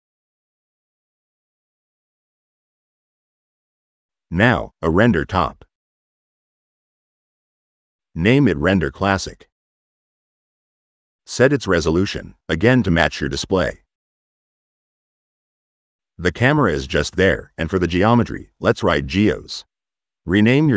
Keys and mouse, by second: 2.6 click, 2.7 click, 4.1 click, 5.3 click, 5.7 click, 6.4 click, 10.9 click, 11.3 click, 11.6 drag, 16.1 click, 16.6-17.9 drag, 18.6 click.